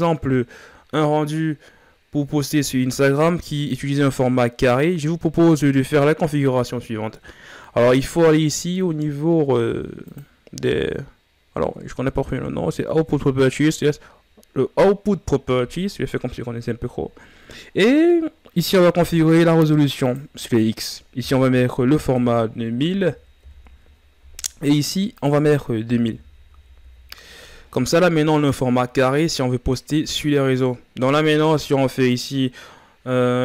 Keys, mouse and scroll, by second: 4.3-23.3 drag, 23.3 KP_0, 31.7-33.1 drag.